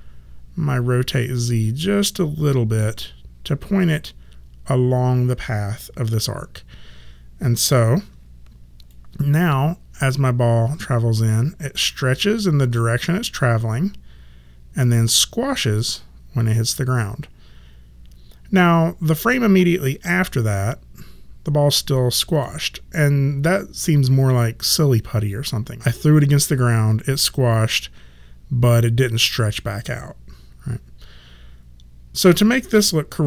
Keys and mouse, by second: 8.8 click.